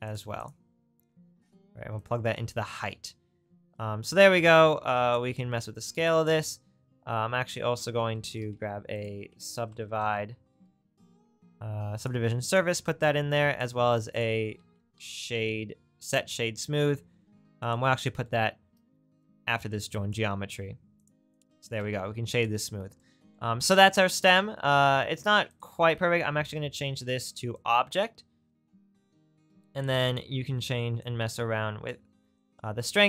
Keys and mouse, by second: 0.5-2.1 right drag, 2.1-7.2 drag, 7.4 click, 8.6 shift+a, 12.5 click, 13.4 click, 13.8 shift+a, 15.7-17.7 drag, 17.7-19.3 right drag, 19.3 click, 21.1-25.5 drag, 25.6-27.8 ctrl+drag, 26.1 ctrl+t.